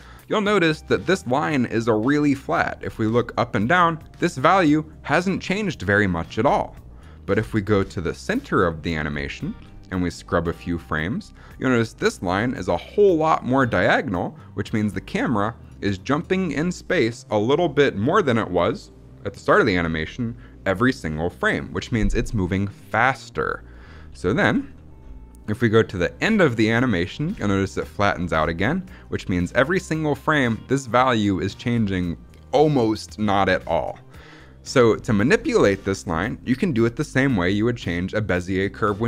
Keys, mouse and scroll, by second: 6.8 middle click, 7.2-8.0 scroll down 4, 8.0 middle click, 8.4 middle click, 8.8 middle click, 9.0-9.8 scroll up 5, 10.0-11.4 drag, 14.5-16.3 drag, 22.1-22.5 drag, 22.8-23.4 drag, 24.3 a, 24.6 middle click, 24.9-25.3 scroll down 2, 25.3 middle click, 25.9 middle click, 26.1-26.7 scroll down 4, 26.6 middle click, 27.2-27.8 scroll up 3, 27.8 scroll up 1, 28.1 middle click, 28.3-28.9 scroll up 2, 28.9-34.7 drag, 34.9-36.5 scroll down 9, 35.5 middle click, 36.3 middle click, 36.6-37.4 scroll up 1.